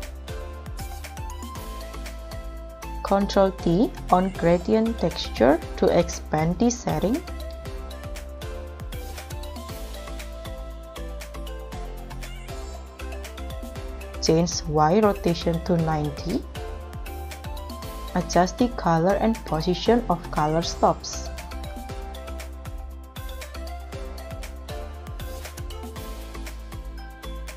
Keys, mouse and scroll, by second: 0.7 middle click, 2.9 ctrl+t, 4.6 middle click, 13.7 scroll down 4, 14.0-14.9 scroll up 12, 16.3 0, 16.5 Return, 17.2-17.9 scroll down 11, 17.9-18.3 scroll up 9.